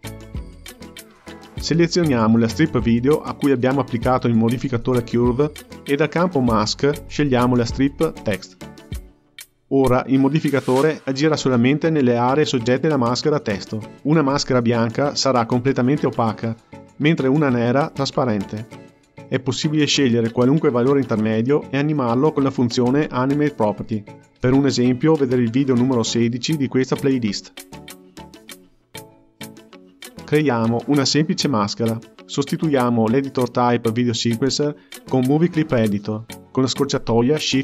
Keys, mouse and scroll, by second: 0.9-1.4 scroll down 1, 1.4-2.8 scroll up 1, 2.8 click, 4.8 click, 5.6-6.1 scroll down 6, 7.0-10.1 drag, 10.5-14.9 drag, 16.5-21.0 drag, 21.2-25.7 drag, 31.3 shift+F2, 35.1 n, 36.1 t.